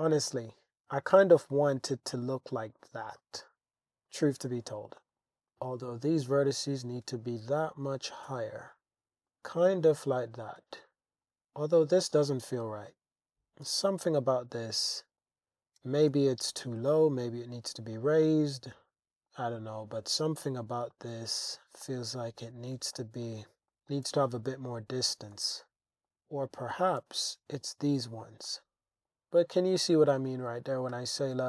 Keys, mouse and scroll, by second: 1.1-3.1 middle drag, 4.1 click, 5.0 shift+drag, 5.4 shift+Tab, 5.5 shift+click, 6.3 g, 6.5 z, 8.1 click, 8.3 Tab, 8.9 Tab, 9.3-10.1 middle drag, 10.7 shift+drag, 11.2 Tab, 11.9 click, 12.3-13.3 middle drag, 13.3 click, 14.2-15.2 middle drag, 15.8 g, 16.1 z, 17.9 click, 18.2-19.3 drag, 20.1 g, 20.3 g, 20.9 click, 21.1 Tab, 21.8-22.4 drag, 22.9-23.3 shift+drag, 23.7 shift+click, 24.1 super+z, 24.4 super+z, 25.3 click, 25.9 click, 26.7 g, 27.0 x, 28.2 click, 28.5-31.4 middle drag.